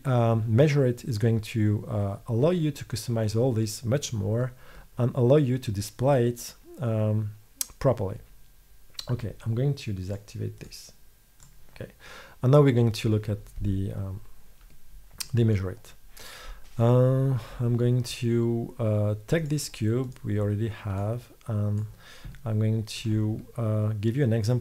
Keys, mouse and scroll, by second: 0.6-4.5 middle drag, 11.2-14.9 drag, 18.8 middle click, 21.4 middle click.